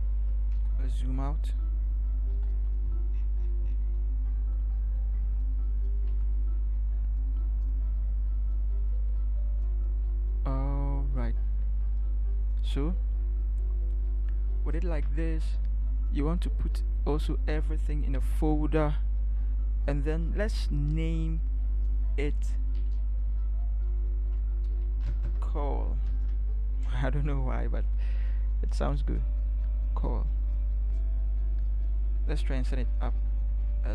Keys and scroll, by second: 0.5 ctrl+0, 2.3 ctrl+=, 6.1 ctrl+h, 13.1 Right, 18.2 ctrl+g, 24.8 a, 26.1 Return, 32.7 Up, 32.9 Up, 33.1 Up, 33.3 Up, 33.3 Up, 33.5 Up, 33.7 Up.